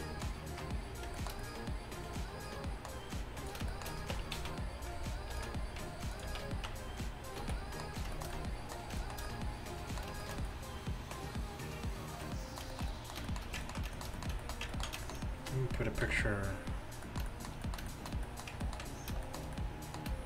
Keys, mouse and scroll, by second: 0.0 a, 3.6-4.2 middle drag, 4.2 Tab, 4.4 middle click, 4.4 z, 5.4 ctrl+r, 6.3 z, 6.7 Tab, 7.5 a, 10.7-12.5 middle drag, 16.1 KP_5.